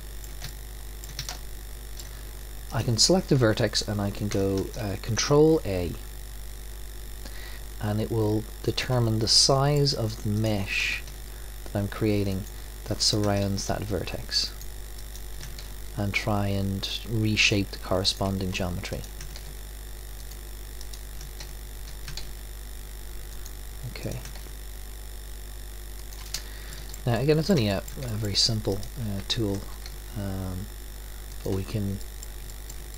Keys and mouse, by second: 2.7-4.6 drag, 4.6 ctrl+a, 9.3-10.4 drag, 10.9 ctrl+a, 11.9 click, 13.0-17.1 drag, 13.5 ctrl+a, 15.6 ctrl+a, 19.0 click, 19.4 ctrl+a, 20.3-22.6 drag, 21.4 ctrl+a, 22.2 ctrl+a, 24.0-25.8 drag, 24.4 ctrl+a, 26.7 click, 29.8 ctrl+a, 30.5-31.6 drag.